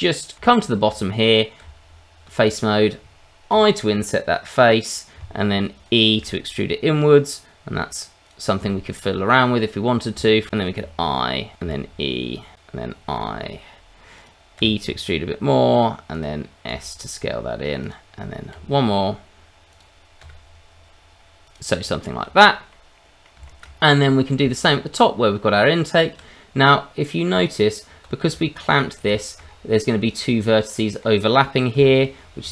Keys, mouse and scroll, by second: 0.4 shift+middle click, 1.6 Tab, 2.4 click, 3.5 i, 5.8 click, 6.1 e, 8.2 click, 9.7 middle click, 10.2 shift+middle click, 10.8 Escape, 10.8 e, 10.8 i, 11.5 click, 11.6 e, 12.5 click, 13.1 i, 14.1 click, 14.6 e, 16.1 click, 16.7 s, 17.8 click, 18.5 i, 19.7 click, 20.2 e, 21.4 click, 21.8 Tab, 22.4 scroll down 2, 22.7 middle click, 23.4 shift+middle click, 23.8 scroll up 2, 24.0 middle click, 24.5 middle click, 24.8-25.5 scroll up 2, 25.5 Tab, 26.5-27.0 scroll up 1, 27.0 middle click, 27.3 Tab, 28.4 shift+middle click, 28.7-30.1 scroll up 5, 29.1 shift+middle click, 30.1 click, 30.3 middle click, 31.0-31.5 scroll up 1, 31.7 g, 32.4 Escape.